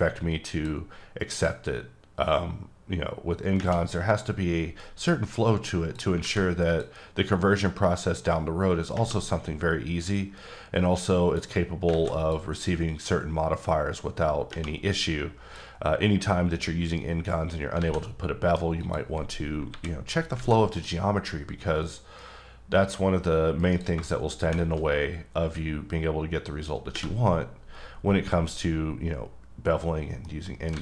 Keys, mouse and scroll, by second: 1.3 click, 2.3 click, 6.2 alt+a, 6.7 click, 7.8 click, 11.9 alt+a, 12.2 click, 12.9 click, 17.8 alt+a, 18.0 middle click, 18.8 click, 19.7 KP_7, 20.4 alt+a, 20.7 click, 22.1-23.6 drag, 23.6-23.9 right drag, 30.2 middle click, 30.7 alt+a.